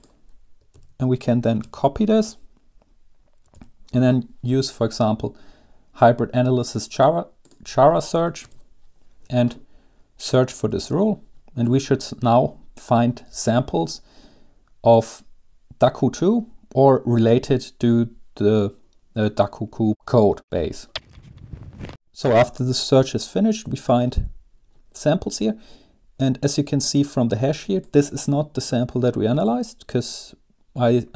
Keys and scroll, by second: 1.0 ctrl+a, 1.8 ctrl+c, 3.8 super+2, 8.6 ctrl+v.